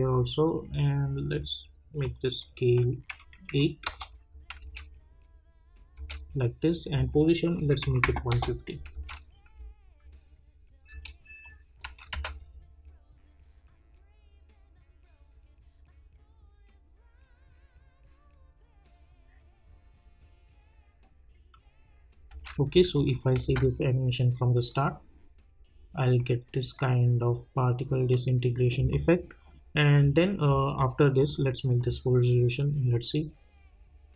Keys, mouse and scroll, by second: 2.0 click, 3.8 Return, 4.1 -, 4.6 space, 7.0 click, 8.3 Return, 8.9 space, 10.9 space, 11.4 click, 12.1 space, 22.3 space, 22.9 click, 23.4 space, 28.8 space, 30.4-31.2 scroll up 1, 31.2 click.